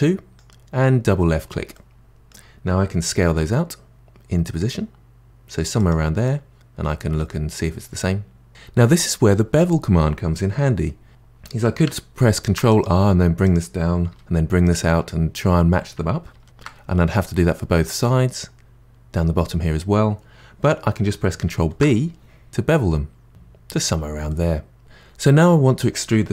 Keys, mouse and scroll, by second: 1.7-3.0 middle drag, 3.0 s, 6.2-8.5 middle drag, 12.4 ctrl+r, 14.1 s, 16.3 ctrl+z, 16.4 ctrl+z, 21.7 ctrl+b, 24.3 middle click.